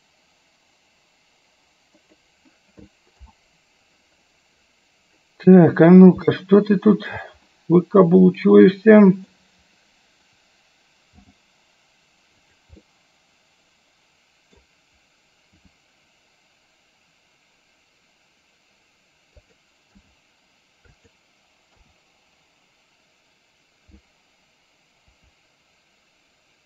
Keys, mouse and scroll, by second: 3.3 KP_7, 6.4 shift+middle click, 7.7-9.4 middle drag, 11.3 g, 12.9-14.8 middle drag, 15.7 r, 20.1 g, 21.9 KP_0, 25.2 KP_7.